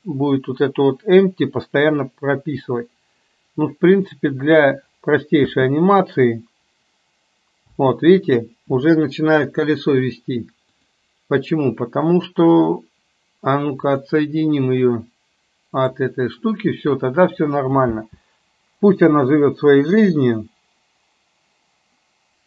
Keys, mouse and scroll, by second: 5.5 space, 7.7 space, 10.8-11.7 drag, 13.8 click, 15.8 click, 18.0 space.